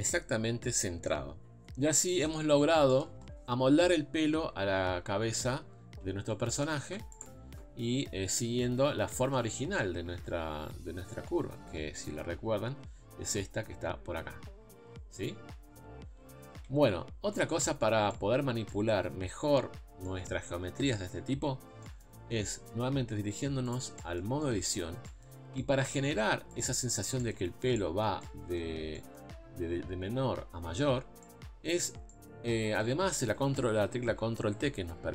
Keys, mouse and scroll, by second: 2.1 middle click, 2.6 scroll down 5, 2.9 middle click, 3.0 scroll up 2, 3.3-4.7 middle drag, 4.7 KP_3, 5.8 scroll up 1, 6.0 Tab, 6.5 shift+middle click, 7.2 z, 7.7 scroll up 2, 8.9-9.3 scroll up 1, 9.3 Tab, 11.7 KP_Divide, 13.0 scroll up 4, 13.2 Tab, 13.7 Tab, 15.9 scroll down 1, 16.1 Tab, 16.8 KP_Divide, 17.8 scroll down 4, 18.1-22.2 middle drag, 22.2 Tab, 22.5 middle click, 22.9-23.7 scroll up 2, 23.7 click, 24.0-26.6 middle drag, 26.6 z, 26.9-33.8 shift+middle drag, 33.8 ctrl+t.